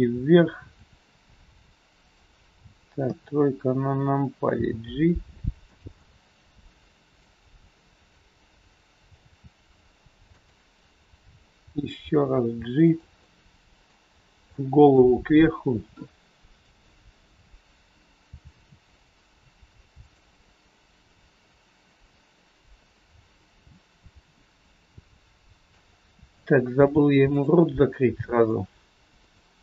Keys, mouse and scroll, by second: 2.0 r, 3.0 KP_3, 4.5 g, 5.9 middle click, 7.4 scroll down 2, 9.2 r, 12.7 g, 13.3 middle click, 14.0-14.6 scroll up 1, 14.6 middle click, 14.6 scroll up 2, 16.5 click, 18.3 r, 21.0 scroll up 2, 21.5 scroll down 2, 21.9 middle click, 25.4 shift+middle click, 25.8-26.2 scroll up 4, 26.4 shift+middle click, 27.4 click, 27.9 middle click, 27.9 scroll up 1, 29.1 click.